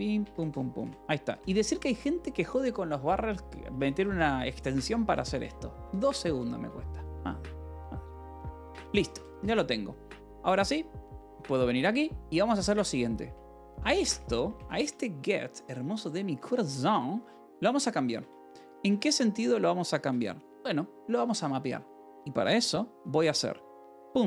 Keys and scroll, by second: 0.1 Escape, 1.1 ctrl+s, 1.3 :, 3.3 k, 3.6 Return, 4.0 j, 4.9 k, 5.3 :, 6.6 j, 8.0-9.6 typing, 8.3 Return, 10.3 Return, 11.9-14.5 typing, 17.0 alt+Tab, 17.2-19.2 typing, 19.4 Return, 20.6 alt+Tab, 20.9 a, 23.7-24.2 typing.